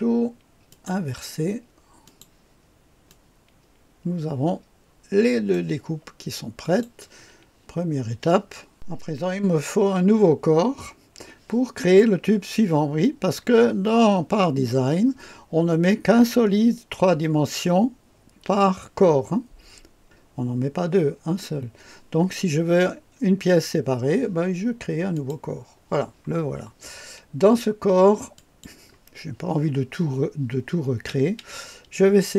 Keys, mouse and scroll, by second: 0.6 click, 2.0 click, 3.0-5.5 drag, 6.6 click, 8.7 click, 25.1 click, 28.3 click.